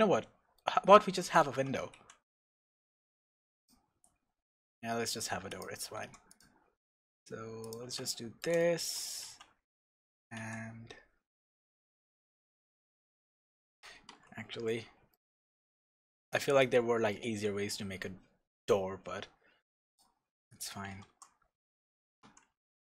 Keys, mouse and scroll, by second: 1.5 Tab, 2.0 ctrl+r, 5.6 click, 6.0 ctrl+r, 7.7 click, 7.8 Tab, 8.1-9.2 middle drag, 9.1 scroll up 2, 9.2 Tab, 10.4 ctrl+r, 14.7 Tab, 14.7 middle click, 15.4 Tab, 15.9-19.9 middle drag, 19.9 click, 20.5 click, 20.9 g, 22.3 Escape.